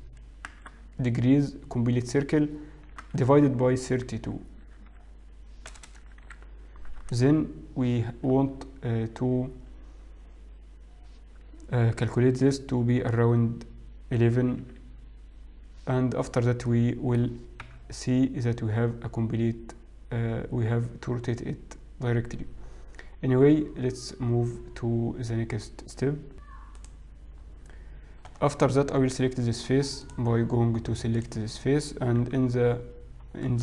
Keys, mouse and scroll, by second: 1.8 3, 1.8 6, 1.8 0, 1.8 space, 3.3 space, 5.6-7.4 typing, 14.7 1, 14.9 1, 17.0 middle click, 17.9 KP_3, 18.8-19.3 scroll up 1, 19.3-19.7 scroll up 2, 19.7-20.0 scroll down 1, 20.0-20.4 scroll up 1, 20.4-21.1 scroll down 2, 30.1 click, 31.2 click, 32.3 KP_1, 33.3-33.6 scroll up 3.